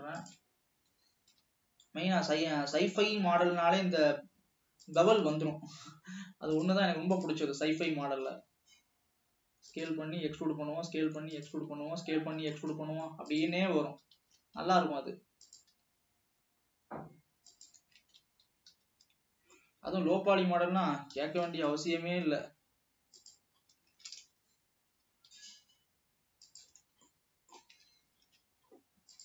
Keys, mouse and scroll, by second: 0.3-0.7 shift+drag, 1.5 ctrl+b, 5.5 alt+a, 7.2 click, 7.7 e, 8.4 s, 10.2 e, 11.8 alt+a, 12.4 scroll up 1, 12.7 middle click, 13.7 click, 14.3 e, 14.7 s, 15.8 e, 18.2 alt+a, 18.9 l, 19.2-19.6 scroll down 4, 19.6-20.7 middle drag, 20.7 scroll up 1, 21.3 g, 23.7 scroll down 1, 24.1 shift+d, 26.8-27.2 scroll down 3, 27.3 middle click, 28.0 alt+a, 28.5 ctrl+s, 28.7 scroll up 2.